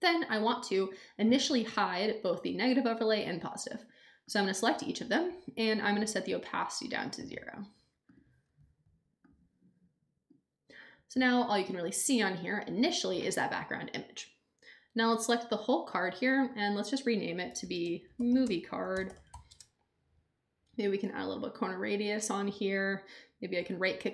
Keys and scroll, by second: 17.3-19.8 typing.